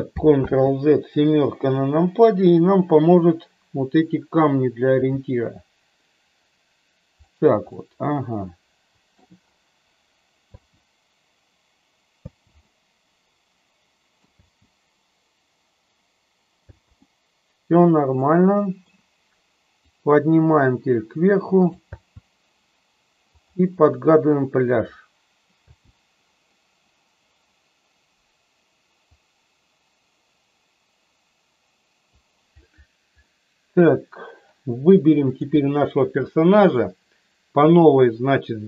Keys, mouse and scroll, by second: 0.3 ctrl+z, 1.5 KP_7, 4.9 r, 7.7-9.1 middle drag, 10.5 space, 12.2 space, 12.6-14.2 middle drag, 14.2 space, 16.6 space, 17.0-18.9 middle drag, 19.9-21.7 drag, 21.9 space, 23.2 click, 25.6 space, 29.1-32.1 drag, 33.2 middle click.